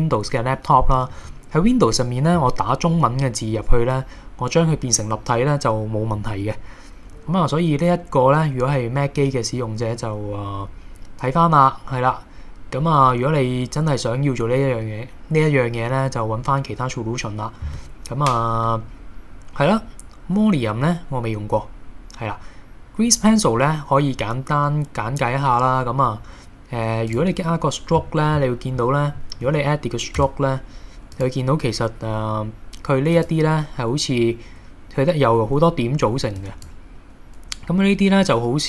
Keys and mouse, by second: 28.7-29.1 middle drag, 29.5 KP_1, 30.2 Tab, 31.2 click, 33.2 click, 36.2 b, 38.2 g.